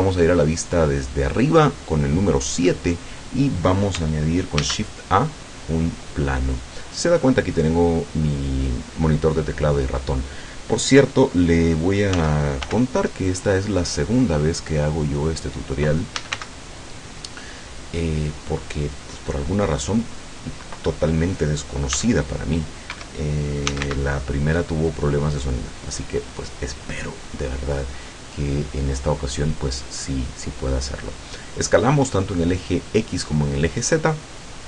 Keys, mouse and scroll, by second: 3.3 scroll up 2, 4.7 shift+a, 6.1 click, 12.2 s, 12.7 y, 15.5 click, 16.0-16.9 typing, 20.3 click, 22.0 s, 23.0 Escape, 23.5-24.4 typing, 25.9 click.